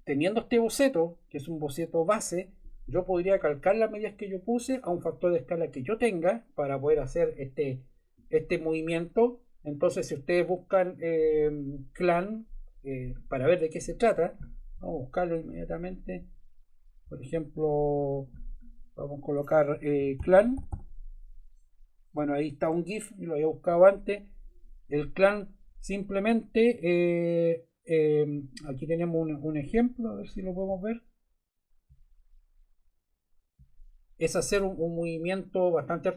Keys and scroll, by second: 19.7-21.0 typing, 22.6 Return.